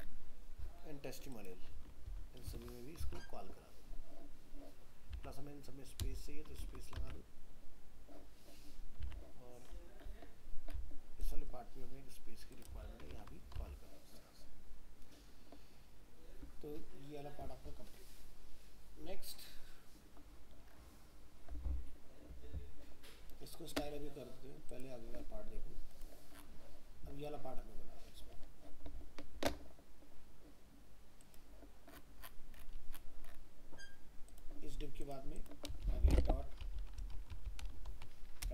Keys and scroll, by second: 2.1 ctrl+v, 3.0 alt+Tab, 6.6 ctrl+s, 7.0 alt+Tab, 13.1 ctrl+s, 13.6 alt+Tab.